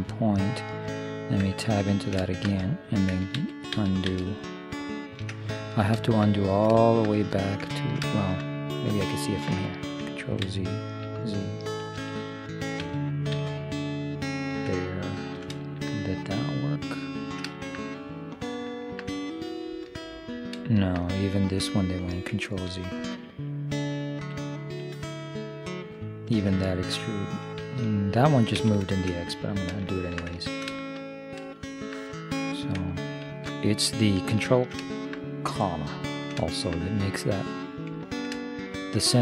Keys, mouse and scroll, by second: 1.4 Tab, 2.1-3.1 middle drag, 3.4 ctrl+z, 3.8 ctrl+z, 4.1 ctrl+z, 5.8-7.4 middle drag, 10.5 ctrl+z, 11.1 ctrl+z, 11.9 ctrl+z, 12.9 ctrl+z, 13.5 ctrl+z, 15.2 middle click, 17.7-18.8 middle drag, 23.0 ctrl+z, 24.2 ctrl+z, 26.8-28.6 middle drag, 28.6 ctrl+z, 29.2-33.9 middle drag, 33.3 ctrl+,, 34.6-36.8 middle drag.